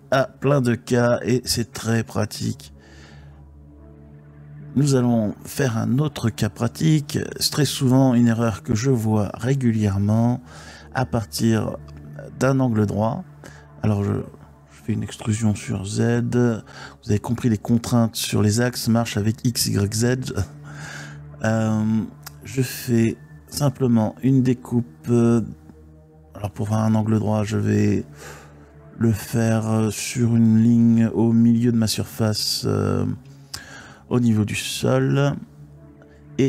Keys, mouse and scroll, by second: 0.8 x, 2.7 Tab, 3.2 x, 5.4-7.6 drag, 8.1 Tab, 8.6 click, 10.6 e, 11.3 z, 13.0 click, 15.3 e, 16.1 z, 17.0 click, 19.5 3, 21.3-22.9 typing, 24.6 click, 25.4 3, 27.2 middle click, 33.2 ctrl+r, 35.2 right click.